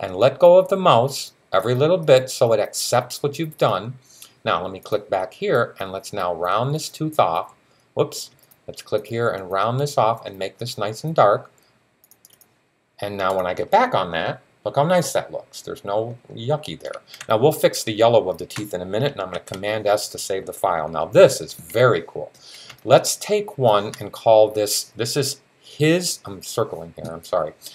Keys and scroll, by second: 19.2 super+s.